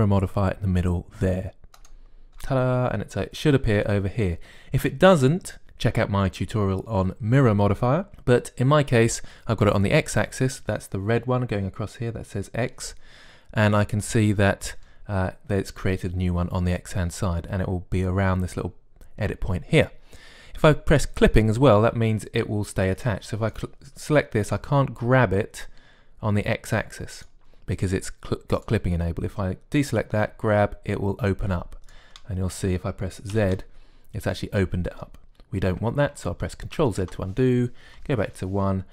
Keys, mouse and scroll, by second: 22.1-25.7 drag, 25.3 g, 29.4-31.7 drag, 31.0 g, 34.1 z, 34.9-37.0 middle drag, 37.7 ctrl+z, 38.7 KP_1.